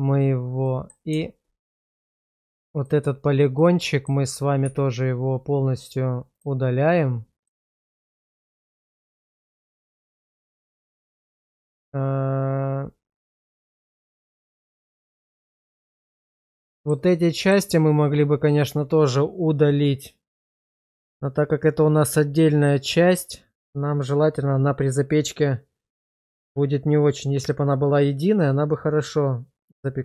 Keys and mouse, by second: 0.6 middle drag, 1.1 Tab, 1.7 middle click, 2.1 shift+middle click, 2.8 click, 3.6 middle click, 4.6 x, 7.5-8.7 middle drag, 8.9 shift+middle click, 10.1-11.1 middle drag, 15.2 middle click, 16.0 middle click, 16.7 shift+middle click, 17.1 middle click.